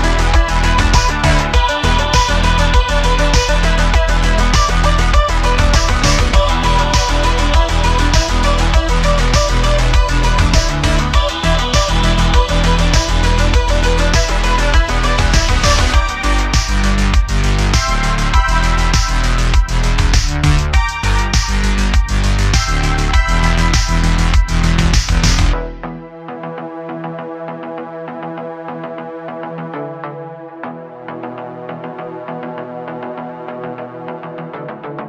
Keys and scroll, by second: 0.8 s, 4.0 Tab, 4.6 `, 8.9 q, 9.6 q, 14.5 q, 17.0 q, 20.8 shift+a, 22.2 s, 22.5 s, 23.9 s, 23.9 z, 27.8 s, 27.9 z, 30.0 Tab, 31.2 super+r, 32.7 alt+3.